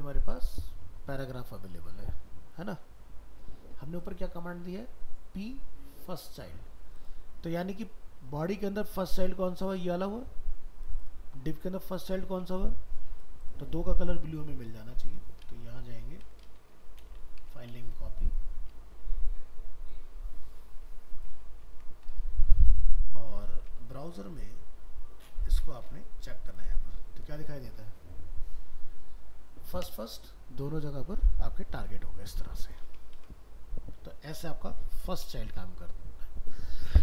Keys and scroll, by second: 16.6 alt+移, 17.1 ctrl+c, 21.4 ctrl+v, 22.1 alt+Tab, 33.2 ctrl+w.